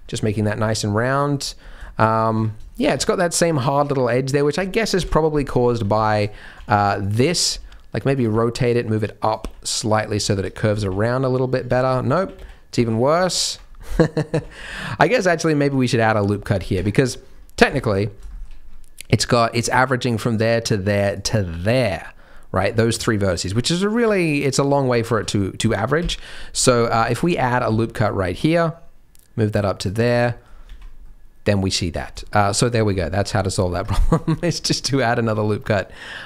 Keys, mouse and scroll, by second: 0.2 z, 0.9 middle click, 1.4-2.5 scroll up 6, 1.8 shift+middle click, 2.3 Tab, 2.6 shift+middle click, 2.9 scroll up 1, 2.9 Tab, 3.4 Tab, 4.9 KP_3, 5.6 z, 6.0 shift+middle click, 6.2 scroll up 2, 6.5 alt+a, 6.7 c, 7.6 r, 8.3 g, 9.4 r, 10.1-10.6 scroll down 3, 10.4 Tab, 10.7 z, 11.7 Tab, 12.2 ctrl+z, 12.3 ctrl+z, 13.2 ctrl+z, 13.6-14.3 scroll up 3, 14.3 a, 14.5 scroll down 4, 15.1 ctrl+r, 17.0 scroll up 1, 17.2 scroll down 1, 17.5-18.3 scroll down 5, 17.7 ctrl+z, 18.3 shift+middle click, 18.5-19.4 scroll up 2, 19.4 click, 20.1 shift+click, 21.1 shift+click, 22.7 middle click, 24.1 shift+click, 24.5 shift+click, 24.9 shift+middle click, 25.3-25.9 scroll up 4, 25.9 KP_3, 26.5 z, 27.0 shift+middle click, 27.2-27.6 scroll up 2, 27.6 ctrl+r, 30.0 Tab, 30.1 middle click, 30.6 z, 31.0 middle click, 31.9 scroll down 5, 32.2 shift+middle click, 32.6 middle click, 33.3-33.7 scroll up 4, 33.7 Tab, 33.9 shift+middle click, 34.5 ctrl+r.